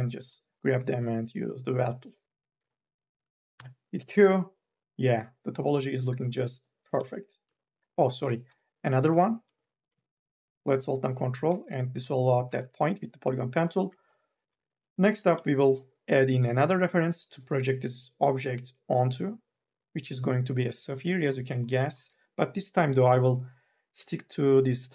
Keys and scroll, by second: 3.4 q, 7.2 ctrl+z, 8.6 q, 9.3 m, 9.8 e, 12.5 q, 15.0 4, 15.2 e.